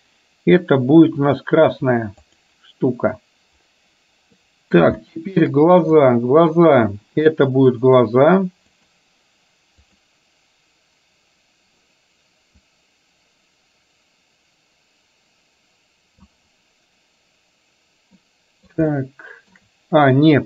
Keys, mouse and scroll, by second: 2.2 click, 4.5 middle click, 5.1 shift+middle click, 6.0-6.7 drag, 7.7-9.1 drag, 10.0 click, 12.6-18.2 drag, 18.2 middle click, 19.0-19.6 shift+middle drag.